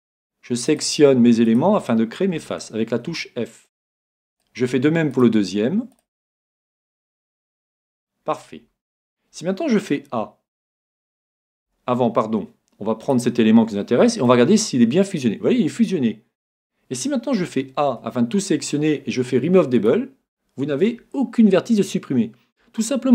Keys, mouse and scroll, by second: 0.0-3.2 right drag, 2.4 f, 3.2-4.9 middle drag, 4.4-8.5 right drag, 7.9 f, 10.7 a, 11.3 a, 11.7 a, 13.0 right click, 14.2 g, 17.4 a, 17.9 a, 19.8-21.7 drag.